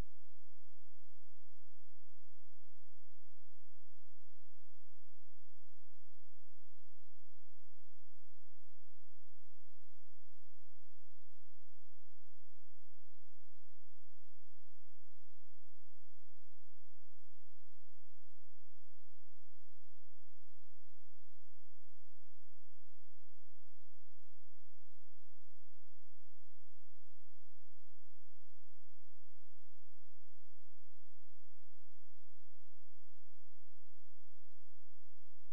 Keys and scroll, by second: 8.9 Delete, 18.3 ctrl+a, 20.2 ctrl+e, 23.3 shift+b, 24.1 ctrl+space, 26.7 Delete.